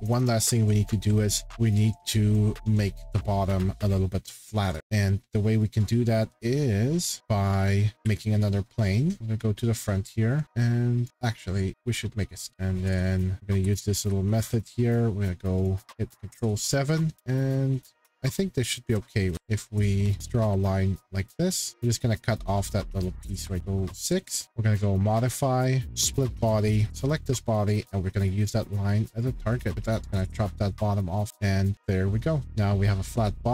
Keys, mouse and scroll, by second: 0.5 middle click, 0.5 middle click, 1.1 scroll, 4.9 click, 5.6-7.0 middle drag, 7.6 shift+middle click, 7.9 middle click, 8.0 Escape, 9.2 click, 9.2 shift+scroll, 11.0 click, 11.1 Escape, 11.1 click, 11.7 click, 12.5 middle click, 13.4 ctrl+Escape, 13.5 ctrl+6, 17.1 ctrl+7, 17.1 click, 18.2 click, 19.3 Escape, 19.3 click, 20.2 click, 20.4 Escape, 21.7 click, 23.4 shift+middle click, 23.6 ctrl+7, 23.8 ctrl+6, 24.1 middle click, 24.3 middle click, 24.4 shift+middle click, 24.4 click, 24.9 click, 26.2 click, 27.0 click, 28.3 click, 29.2 click, 30.1 middle click, 31.2 click, 31.3 middle click, 33.0 middle click, 33.1-33.5 shift+middle click, 33.2 scroll.